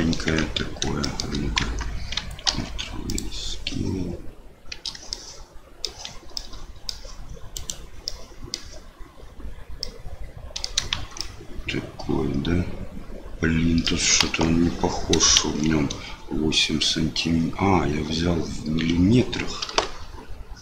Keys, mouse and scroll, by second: 0.2 Tab, 1.0 shift+click, 1.6 Tab, 2.4 ctrl+a, 5.1 middle click, 6.3 middle click, 7.5 click, 8.0 middle click, 9.8 middle click, 10.9 shift+z, 11.1 middle click, 11.4 click, 11.9-13.8 middle drag, 14.2 KP_1, 15.4 shift+z, 19.7 KP_7.